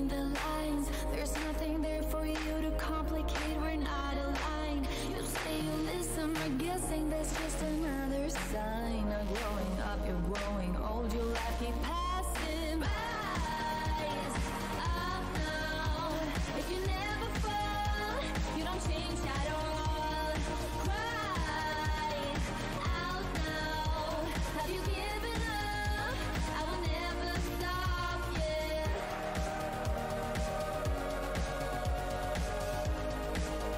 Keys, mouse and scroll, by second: 0.0-1.3 typing, 1.6-2.1 scroll down 1, 2.5-3.3 typing, 2.9-3.7 scroll down 1, 3.9 click, 4.5 ctrl+click, 5.1 Delete, 6.5 right click, 7.4 click, 9.2 shift+v, 9.6-10.4 scroll down 1, 10.7 click, 11.8 w, 12.5 space, 12.8 f, 13.2 scroll down 1, 13.7 alt+scroll down 1, 14.5 alt+shift+w, 14.6 alt+scroll down 1, 16.1 alt+scroll down 1, 16.7 alt+click, 16.9 alt+scroll, 18.0 alt+click, 18.9 ctrl+click, 20.4 alt+r, 20.4 shift+d, 21.8 shift+click, 22.4 alt+scroll, 23.1 alt+click, 25.0-25.5 alt+scroll down 1, 28.0 alt+click, 28.7 click, 29.0 space, 30.5 scroll down 1, 31.4 click, 32.7 space, 33.2 scroll down 1.